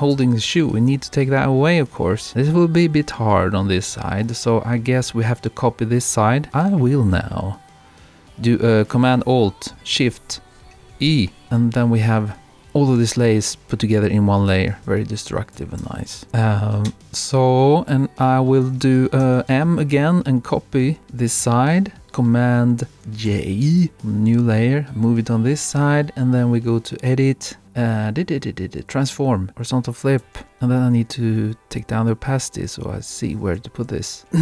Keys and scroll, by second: 14.9 super+-.